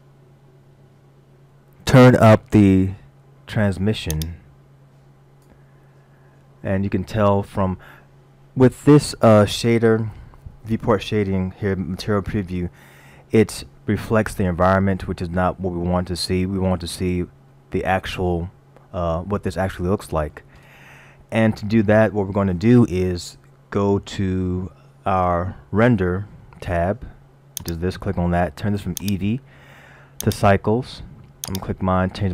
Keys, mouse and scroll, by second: 4.1 click, 6.8 scroll down 1, 17.5 middle click, 26.4-27.5 scroll up 4, 27.5 scroll up 1, 27.7 click, 29.0 click, 31.5 click.